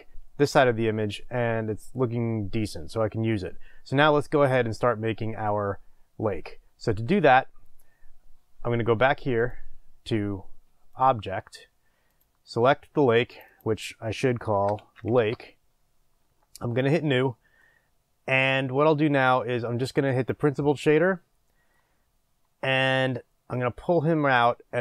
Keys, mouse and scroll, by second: 15.2-17.5 drag, 16.2 Return, 17.6-20.3 middle drag, 20.3-24.8 drag.